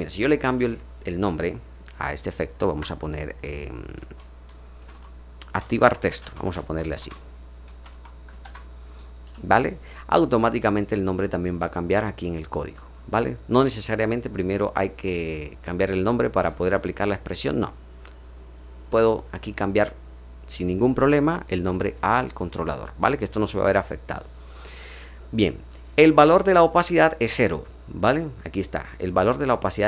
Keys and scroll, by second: 2.6 Return, 3.9-8.3 typing, 13.0-13.7 typing.